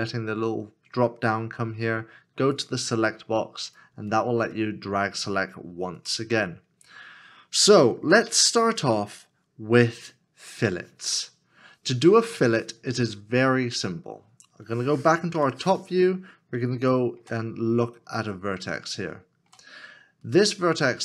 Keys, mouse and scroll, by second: 15.3 KP_7, 16.8 shift+middle click, 18.9 shift+middle click.